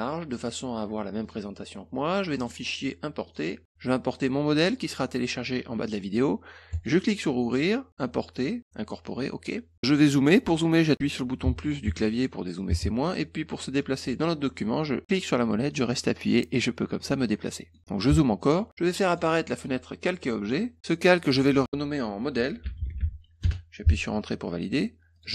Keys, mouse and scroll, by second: 1.2 click, 2.3 click, 3.2 click, 4.1 click, 6.7 click, 7.9 click, 15.0-17.7 middle drag, 19.0 click, 20.2 click, 21.2 click, 21.3 click, 22.1-23.5 typing, 25.1 click.